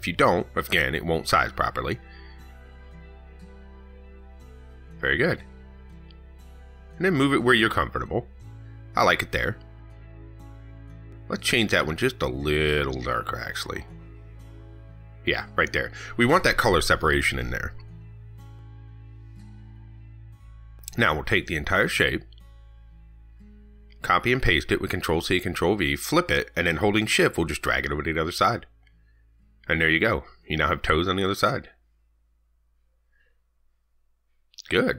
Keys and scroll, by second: 25.5 ctrl+c, 25.7 ctrl+v, 33.9 ctrl+s.